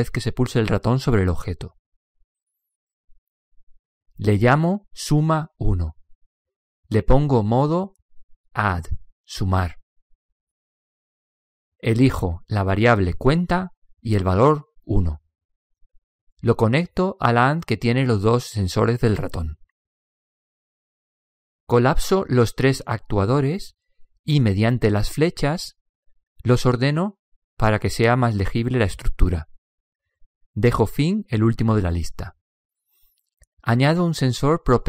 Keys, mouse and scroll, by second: 1.4 middle click, 2.3 click, 5.2 click, 9.4-10.5 middle drag, 10.5-14.0 drag, 14.9 click, 18.4-19.7 middle drag, 19.7 click, 22.7-25.3 drag, 26.4 click, 28.2-31.1 drag, 32.5-34.1 middle drag.